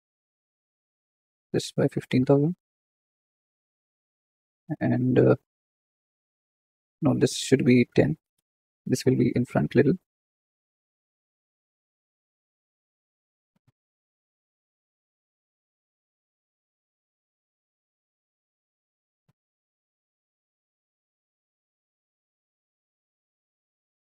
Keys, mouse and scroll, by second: 0.8 click, 2.6 KP_0, 3.8 click, 6.5 click, 8.3 click, 9.0 g, 10.8 r, 14.0 g, 16.2 KP_1, 17.0 g, 20.2 r, 23.6 g.